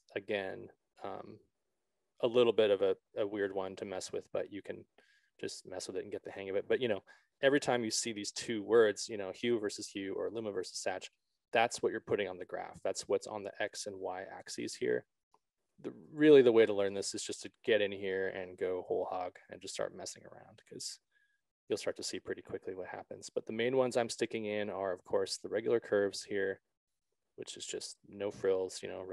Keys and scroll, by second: 8.0 ctrl+z, 22.0 ctrl+z.